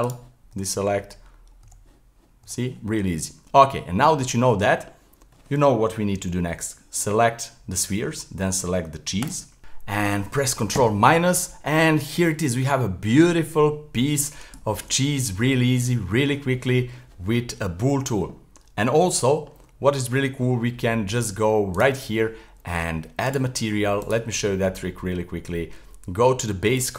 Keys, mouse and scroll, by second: 0.0 right click, 0.5 l, 1.6 l, 2.4 l, 3.1 Tab, 3.5 middle click, 3.8-4.4 scroll down 3, 4.4-7.4 middle drag, 9.2 shift+right click, 9.6-11.1 middle drag, 11.1 ctrl+KP_Subtract, 11.7-14.1 middle drag, 14.1-14.7 scroll down 1, 14.7-18.9 shift+middle drag, 19.3-21.9 middle drag, 21.9 click, 23.3 click, 24.0-25.4 drag, 25.4-26.1 scroll down 2, 26.1-26.7 scroll down 3, 26.7 click.